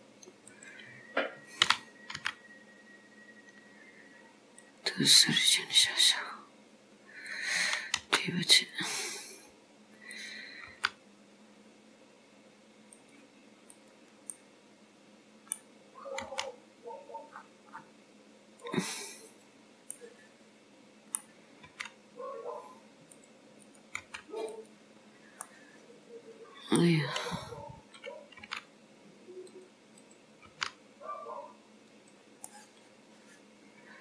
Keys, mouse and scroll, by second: 5.6-6.0 scroll up 3, 6.3 scroll down 1, 6.4 scroll up 1, 7.3 click, 8.0 g, 10.2 click, 10.8 g, 13.8 click, 14.4 middle click, 16.3 g, 19.3 click, 20.0 middle click, 21.7 g, 23.6 click, 24.0 g, 25.0-25.6 scroll down 2, 25.5 middle click, 27.1 scroll down 1, 28.0 click, 28.5 g, 30.0 click, 30.6 g, 32.5 middle click.